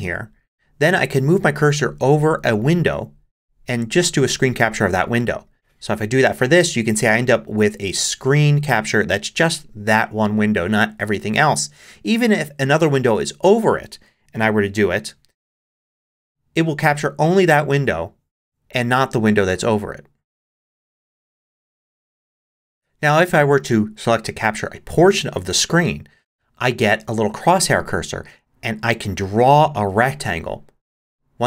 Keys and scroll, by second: 14.6 shift+super+5, 22.7 shift+super+5.